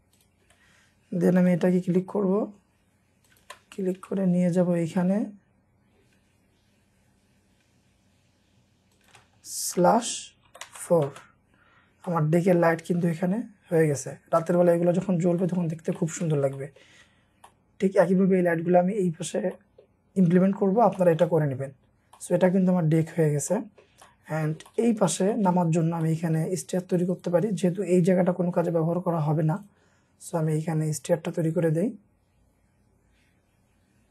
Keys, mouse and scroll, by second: 1.4 typing, 1.6-1.9 scroll up 1, 3.4 typing, 3.6 scroll down 1, 4.3 shift+scroll down 1, 5.0 shift+middle click, 5.5 shift+scroll down 1, 6.2 shift+scroll up 1, 9.0 shift+click, 9.8-11.1 typing, 10.7 Return, 11.8 scroll down 1, 12.1 middle click, 14.1 scroll up 1, 14.4 middle click, 15.1 scroll down 1, 15.4 middle click, 17.0-17.4 scroll up 1, 17.5 middle click, 20.3-20.8 scroll down 1, 21.0 shift+middle click, 21.5-21.9 scroll down 1, 22.2 middle click, 22.9 scroll up 1, 23.5 middle click, 24.6 scroll up 1, 24.7 middle click, 25.1 scroll down 1, 25.3 shift+middle click, 25.8 scroll up 1, 26.0 middle click, 26.6-27.1 scroll up 1, 27.1 double click, 29.9-30.8 scroll up 1.